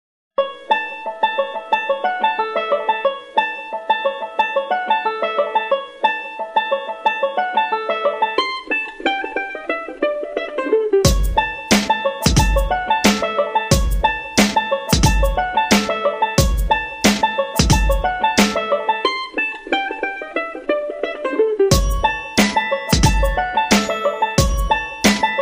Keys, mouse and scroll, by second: 7.6 click, 13.5 click, 16.6 click, 17.7 click, 17.8 click, 18.7 click, 18.8 click, 25.3 click.